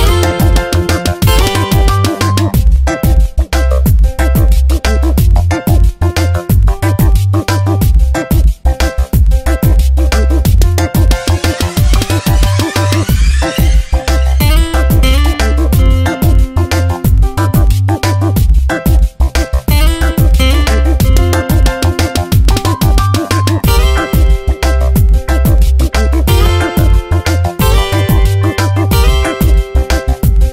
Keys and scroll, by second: 5.7 Return, 6.3 Tab, 6.6 Down, 7.5 ctrl+1, 8.7 space, 15.6 ctrl+z, 16.8 ctrl+z, 20.4 ctrl+z, 20.7 Tab, 21.3 space, 22.4 ctrl+z, 23.1 space, 26.1 ctrl+z, 27.8 ctrl+z, 30.3 ctrl+z.